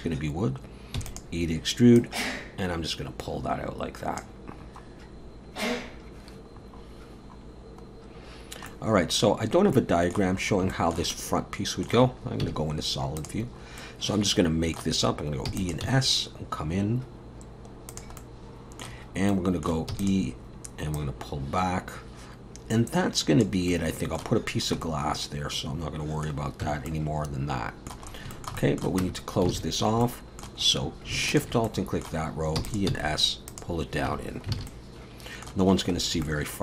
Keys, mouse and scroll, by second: 1.0 e, 2.0 click, 6.5-7.1 scroll down 3, 7.1-7.8 scroll down 2, 7.8-8.7 scroll down 3, 8.7 middle click, 9.7 middle click, 10.3-10.7 scroll up 3, 10.7 shift+middle click, 11.1 middle click, 12.4 z, 13.5 scroll up 3, 13.8 middle click, 15.5 e, 15.8 s, 18.2 middle click, 19.3 middle click, 19.9 e, 21.0 click, 23.7 middle click, 24.5-24.8 scroll down 2, 24.8 middle click, 26.6 Tab, 26.9 middle click, 28.1 scroll up 2, 28.3 shift+middle click, 28.6 middle click, 29.0 Tab, 29.5 alt+a, 30.0 middle click, 30.6 scroll up 2, 31.3 alt+shift+click, 31.7 middle click, 32.6 e, 32.9 s, 34.1 Tab, 34.2 scroll down 3, 34.6 alt+a, 34.7 middle click, 36.0-36.3 scroll down 2, 36.2 middle click.